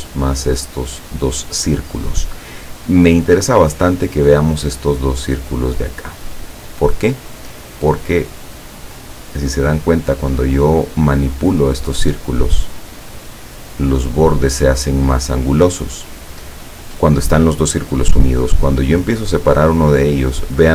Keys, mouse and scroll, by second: 7.7-8.8 drag, 19.9 click.